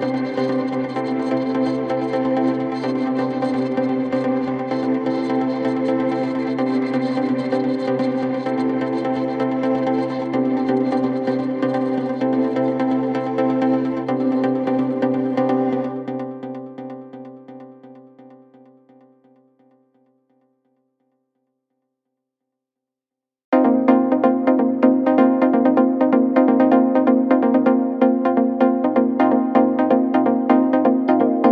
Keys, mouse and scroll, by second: 0.2 click, 1.0-2.2 alt+scroll down 2, 2.2-2.5 alt+scroll up 1, 2.8 ctrl+t, 3.9-5.1 drag, 5.5-5.9 alt+scroll up 2, 6.1-11.2 drag, 11.2 ctrl+z, 11.7-16.2 drag, 14.6-15.8 shift+drag, 16.2-17.1 alt+scroll down 2, 17.9 alt+scroll up 1, 20.0 space, 20.1 click, 20.4-20.9 space, 21.3-22.3 alt+scroll down 2, 22.3-23.2 alt+scroll up 1, 25.2-25.7 alt+scroll down 2, 25.7 scroll up 1, 25.8 space, 25.9-28.3 drag, 28.3 Delete, 30.0 click.